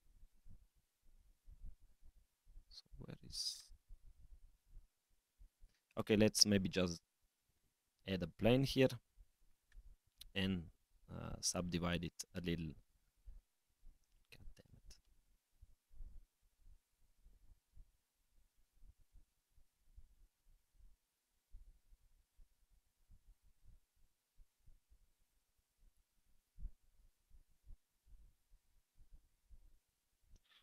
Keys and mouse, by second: 3.7-5.1 middle drag, 6.0 shift+a, 8.0 s, 10.9 F3, 12.2 Tab, 12.4 Tab, 13.1 a, 14.0 Tab, 14.8 Escape, 15.3 Tab, 15.3 click, 16.1 click, 17.2 Tab, 21.5-22.6 right drag, 25.2 click, 26.1 click, 27.2-30.6 drag.